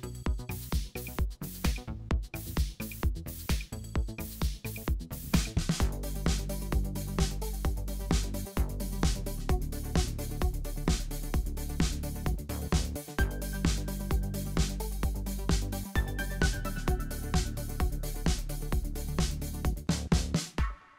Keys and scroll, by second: 1.8 o, 4.4 v, 5.4 super+c, 5.9 super+f, 7.8 BackSpace, 8.9 BackSpace, 9.5 alt+super+b, 9.7 w, 10.1 v, 12.7-13.6 typing, 18.9-20.3 typing.